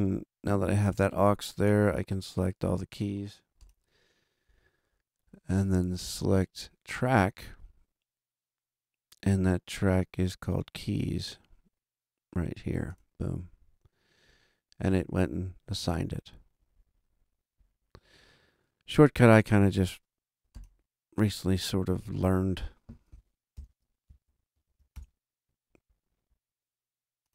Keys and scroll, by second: 23.5 shift+super+n, 24.2 shift+super+Right, 24.5 super+Down, 24.9 super+Return.